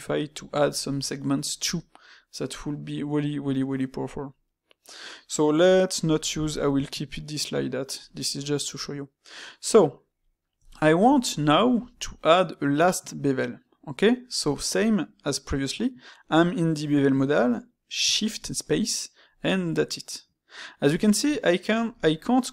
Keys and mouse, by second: 3.8-6.8 middle drag, 8.5-14.4 middle drag, 22.0-22.5 shift+middle drag.